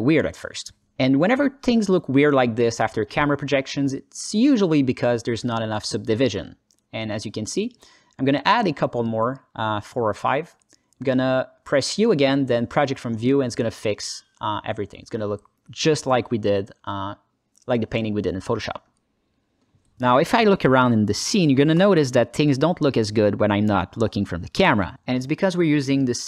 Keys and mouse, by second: 2.2 Tab, 4.7 click, 8.1 click, 8.3 click, 12.0 u, 13.7 Tab, 19.3-19.8 alt+shift+middle drag, 20.4 KP_0, 21.3-22.3 alt+middle drag, 22.5 ctrl+alt+middle drag, 22.7 ctrl+alt+click, 23.2-25.3 alt+drag.